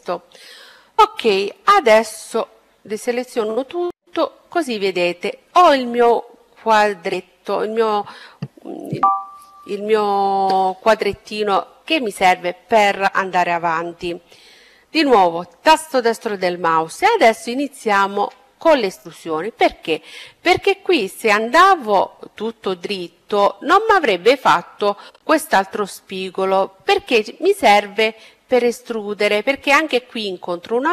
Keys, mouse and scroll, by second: 1.0 a, 14.1-15.9 right drag, 16.5-18.4 middle drag, 22.9-24.8 right drag, 26.2-28.6 middle drag, 28.7 middle click.